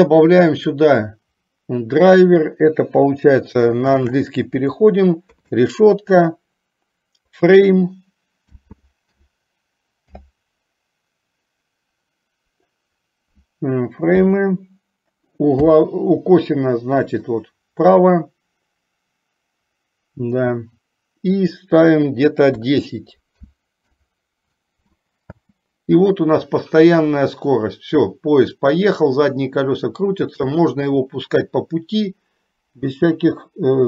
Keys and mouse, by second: 0.6-24.2 drag, 25.5 space, 33.2 space.